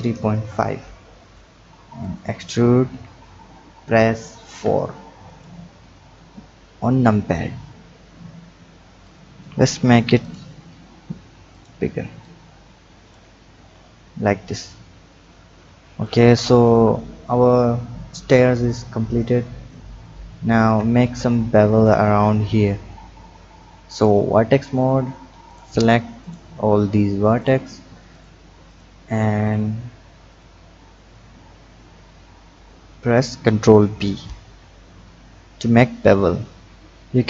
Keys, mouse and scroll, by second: 2.0 click, 2.8 e, 5.6-6.8 scroll down 1, 8.0-9.0 scroll down 1, 9.0 click, 10.2 click, 11.5 shift+click, 12.2-13.5 drag, 13.5 Tab, 14.5 click, 19.2 click, 20.0-20.7 scroll up 3, 20.7 Tab, 21.5-24.1 drag, 25.4 click, 26.2 shift+click, 27.4 shift+click, 28.1 shift+click, 28.7 shift+click, 29.4 shift+click, 30.3 shift+click, 31.0 shift+click, 31.6 shift+click, 32.1 scroll down 1, 32.7 click, 34.0 ctrl+b.